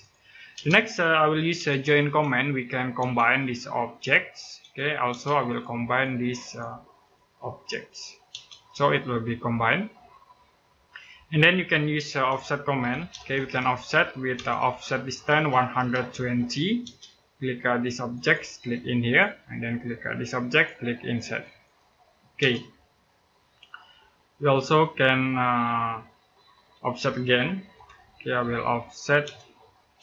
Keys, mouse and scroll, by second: 0.3 space, 1.3 j, 2.8 space, 3.2 click, 4.4 space, 5.3 click, 8.1 space, 12.1-14.1 typing, 15.2-16.6 typing, 17.9 click, 22.2 space, 22.9 middle click, 27.0-27.5 typing, 29.0 space.